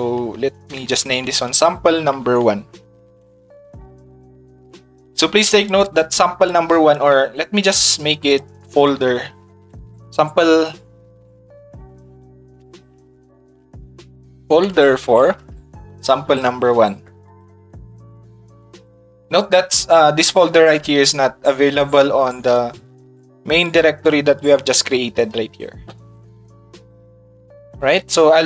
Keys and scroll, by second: 0.7 s, 1.5 space, 12.2 shift+f, 14.3-15.3 typing.